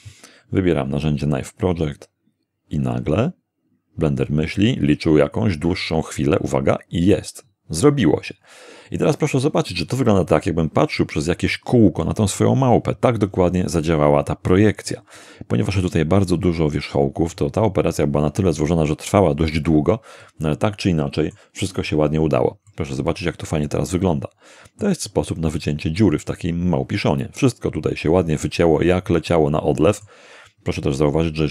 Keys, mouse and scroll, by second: 1.8 click, 14.7-15.3 scroll up 1, 20.2-21.5 middle drag, 22.7-25.0 middle drag, 25.1-26.2 middle drag, 26.3-30.2 middle drag.